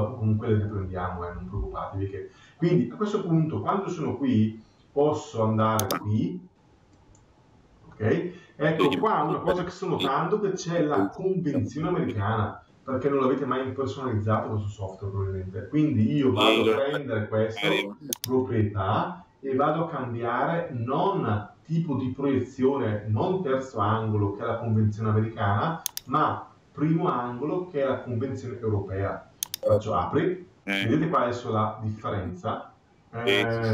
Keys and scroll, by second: 9.4 Escape.